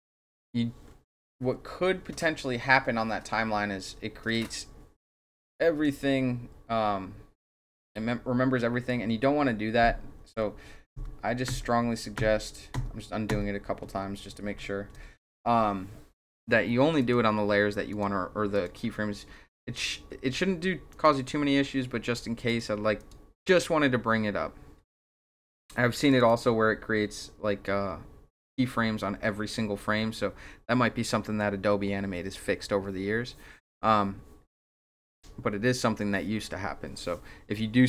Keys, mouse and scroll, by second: 0.0 click, 5.8-8.9 drag, 10.9 ctrl+z, 11.5 ctrl+z, 12.2 ctrl+z, 13.3 ctrl+z, 14.4 ctrl+z, 17.0 click, 17.9 click, 18.5 click, 20.9 click, 22.5 click, 23.0 click, 23.5 click, 26.1 click, 26.3 click.